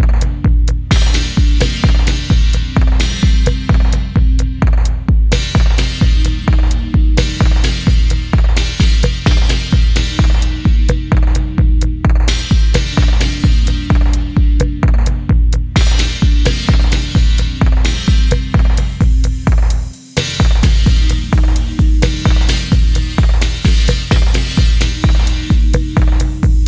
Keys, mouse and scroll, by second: 1.0 middle click, 1.3 typing, 2.0 middle click, 4.3 middle click, 7.3 middle click, 13.8-15.3 scroll up 1, 17.0 typing, 20.1-21.6 scroll down 1, 22.4 middle click, 24.6 middle click, 25.5 scroll up 1, 25.7-26.1 scroll down 1, 26.1 middle click.